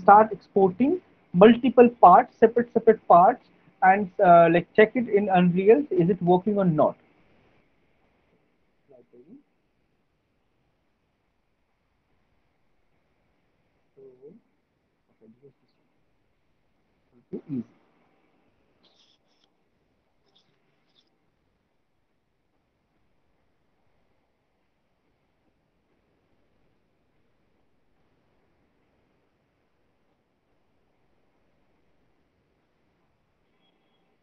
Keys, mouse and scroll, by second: 5.4 click, 8.6 click.